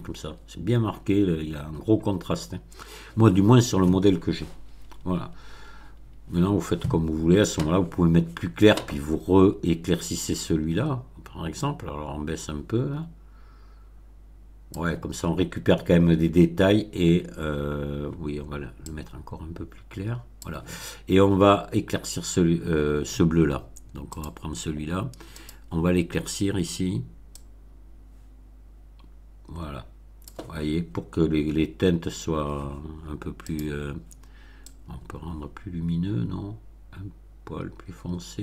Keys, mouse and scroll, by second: 0.7 scroll down 2, 11.6-14.9 drag, 18.8-20.5 drag, 24.1 click, 25.3 click, 27.3-30.4 drag, 33.4 click, 34.6-38.4 drag.